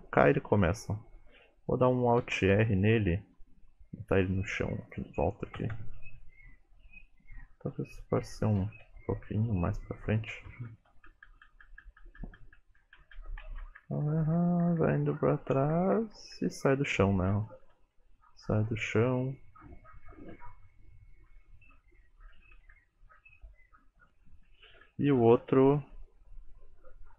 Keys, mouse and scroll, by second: 0.1 Right, 0.4 Left, 0.7 Left, 2.3 alt+r, 4.9 click, 8.6 g, 10.5 Left, 10.7 Left, 11.0 Left, 11.1 Left, 11.3 Left, 11.5 Left, 11.7 Left, 11.9 Left, 12.1 Left, 12.3 Left, 12.4 Left, 12.6 Left, 12.8 Left, 13.0 Left, 13.2 Left, 13.5 Right, 13.7 Right, 14.9 Right, 15.0-15.6 Right, 15.8 Right, 16.0 Right, 16.2 Right, 16.4 Right, 17.4 Left, 17.6 Left, 17.8 Left, 18.2 Right, 18.4 Right, 18.6 Right, 18.9 Right, 20.1 Left, 20.4 Left, 20.7 Right, 21.0 Left, 21.3 Right, 21.6 Left, 21.7 Left, 21.8 Right, 21.9 Right, 22.0 Right, 22.5 Left, 22.6 Left, 22.8 Left, 22.9 Right, 23.0 Right, 23.2 Right, 23.5 Right, 23.6 Right, 23.8 Right, 24.0 Right, 24.1 Right, 24.5 Left, 24.7 Left, 24.9 Left, 25.1 Left, 25.3 Right, 25.6 Left, 25.8 Left, 26.0 Left, 26.2 Left, 26.6 Right.